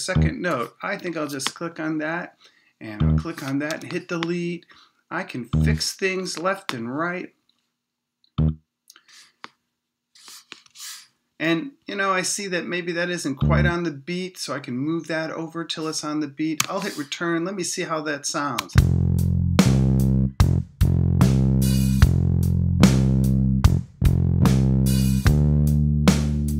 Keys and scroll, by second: 1.0 BackSpace, 3.7 BackSpace, 6.2 BackSpace, 10.6 BackSpace, 16.6 Return, 18.6 space.